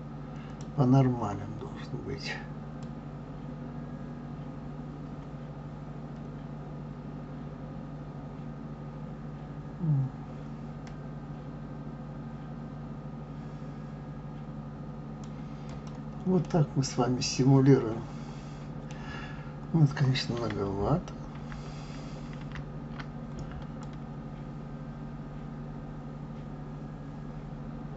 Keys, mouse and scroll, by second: 2.8 click, 15.7 click, 16.4-19.3 middle drag, 19.3-19.7 scroll up 3, 19.8 scroll down 1, 21.1 scroll down 1, 21.3 ctrl+z, 22.4 ctrl+z, 23.8 click.